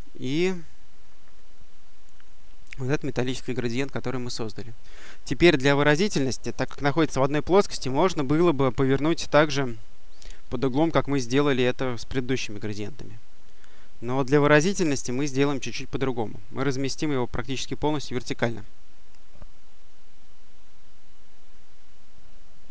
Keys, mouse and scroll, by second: 2.0 click, 10.3-11.9 drag, 12.7-17.1 drag, 18.5-22.7 drag.